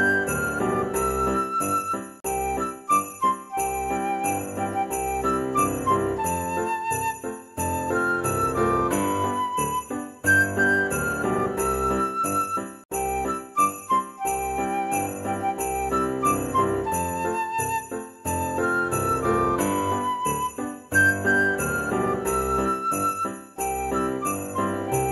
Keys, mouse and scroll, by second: 1.5 click, 3.6-5.4 drag, 5.4-6.6 middle drag, 7.6 click, 8.8 click, 15.1 click, 16.0 middle click, 17.1-21.9 drag, 20.0 KP_0, 24.3 g, 24.4 KP_Subtract, 24.4 z, 24.4 KP_3.